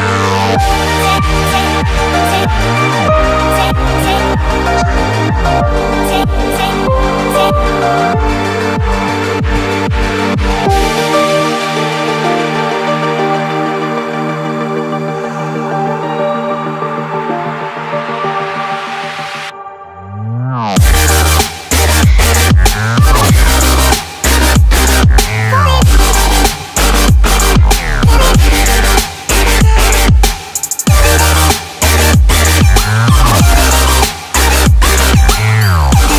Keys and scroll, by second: 24.6 Escape, 27.5 ctrl+x.